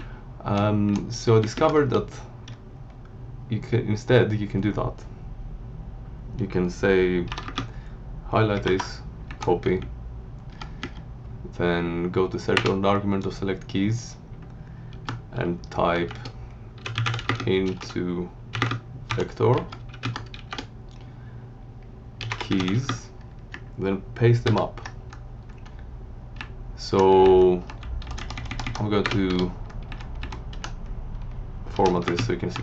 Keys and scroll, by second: 1.1 Right, 7.3 F1, 7.4 space, 8.6 alt+w, 9.3 Up, 9.7 Right, 15.9-20.3 typing, 19.5 Right, 21.9-23.0 typing, 24.4 ctrl+y, 26.4 Up, 27.8 Left, 28.0 Down, 28.1 Left, 29.0 BackSpace, 29.3 Return, 29.8 Up, 30.5 Home, 31.8 F1, 32.1 space, 32.4 Tab.